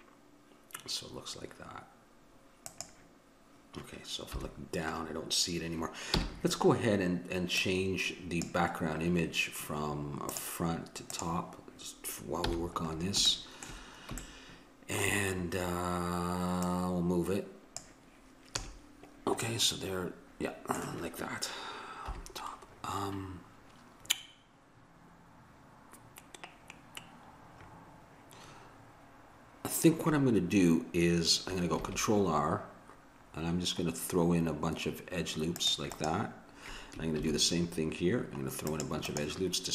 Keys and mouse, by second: 4.4 KP_7, 6.1 n, 7.6-9.3 drag, 10.3-12.0 drag, 12.4 n, 12.9-14.5 middle drag, 16.7-18.5 right drag, 18.5 a, 19.5 middle click, 22.2 KP_7, 31.7 ctrl+r, 37.2 ctrl+r.